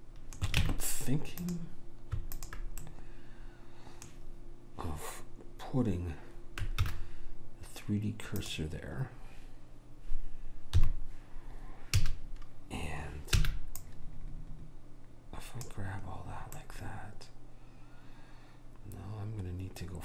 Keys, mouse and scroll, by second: 0.8 ctrl+Tab, 2.5 click, 4.4-5.5 middle drag, 7.0 shift+s, 10.9 KP_3, 12.1 a, 13.6 b, 16.7-17.7 drag, 17.7 middle click.